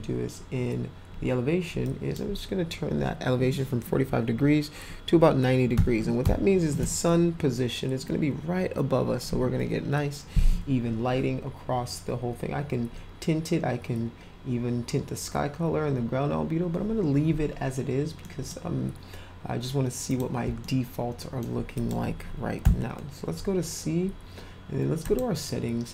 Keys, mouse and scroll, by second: 1.8 click, 6.2 0, 6.6 Return, 18.2-18.5 middle drag, 20.1 click, 20.6 alt+middle click, 21.7 click, 25.0 click.